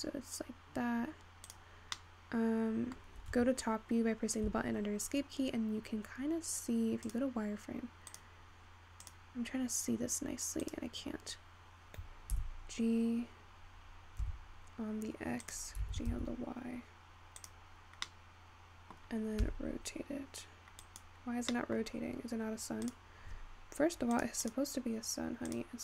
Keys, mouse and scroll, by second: 2.1-4.0 middle drag, 5.1-6.4 scroll up 1, 6.4-7.3 scroll up 7, 7.3 click, 8.3 click, 9.1 click, 10.9 click, 12.8 g, 19.0 middle click, 19.9 r, 23.2-25.8 drag.